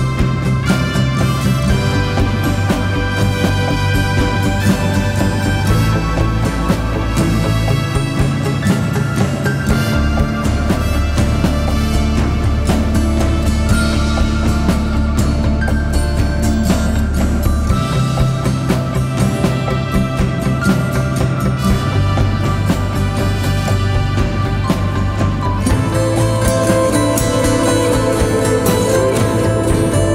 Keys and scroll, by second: 1.1 ctrl+z, 2.4 4, 2.7 shift+i, 4.3-5.3 typing, 6.9-8.7 typing, 10.1 2, 11.6 ctrl+d, 11.7 Escape, 12.9 0, 13.5 ctrl+z, 14.0-15.2 typing, 15.3 Return, 18.9 4, 21.2-22.2 typing, 28.1 ].